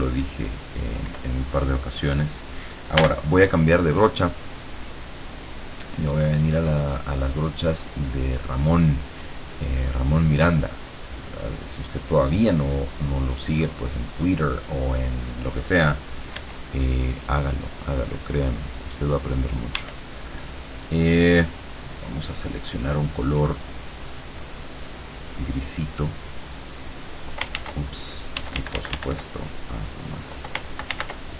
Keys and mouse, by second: 0.2 click, 1.1 click, 1.1 e, 3.1 b, 5.1 click, 6.1 click, 6.7 click, 8.1-12.9 drag, 13.3 click, 16.4 e, 16.9-19.9 drag, 19.8 e, 22.1 click, 23.4-24.5 drag, 26.5 click, 27.6 ctrl+z, 28.4 d, 29.6 click, 30.9 ctrl+z.